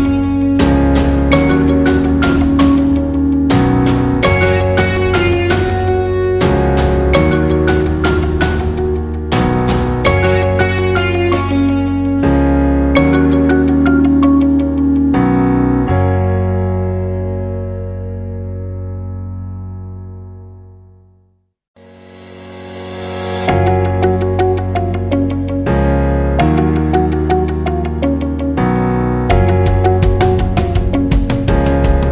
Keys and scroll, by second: 14.2 ctrl+alt+shift+j, 17.8 ctrl+alt+shift+j.